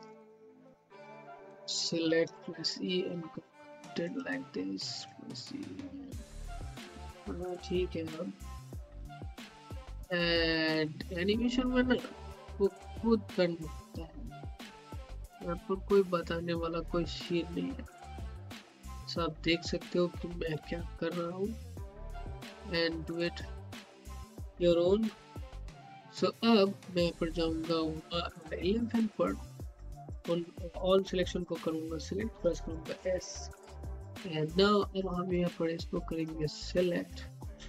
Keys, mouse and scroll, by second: 0.1-2.3 drag, 2.3 e, 3.0-6.3 drag, 8.9 click, 9.7-11.6 typing, 13.0-20.3 typing, 21.3 typing, 22.2 scroll down 1, 22.9-25.7 alt+middle drag, 27.1 click, 31.4 click, 32.9 s, 34.2 click, 34.4 scroll up 1, 35.0 alt+middle click, 35.7 click.